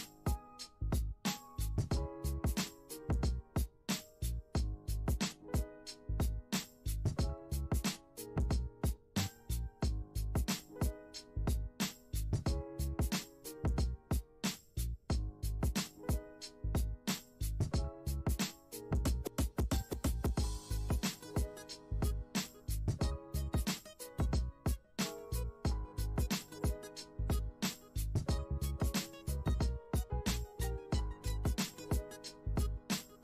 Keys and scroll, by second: 9.3 F1.